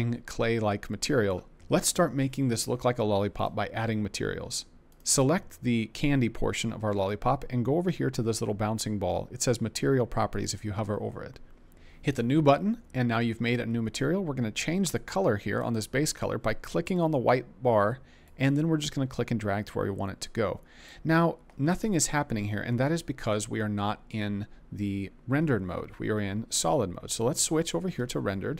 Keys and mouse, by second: 10.3 click, 12.1 click, 16.8 click, 26.1 z.